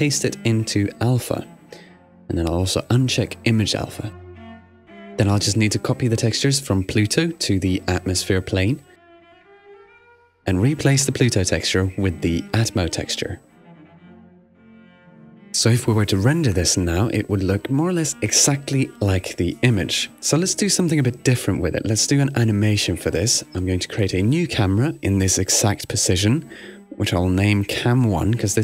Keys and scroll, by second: 4.3 super+w, 8.6 shift+super+a, 8.7-9.6 typing, 16.7 super+r.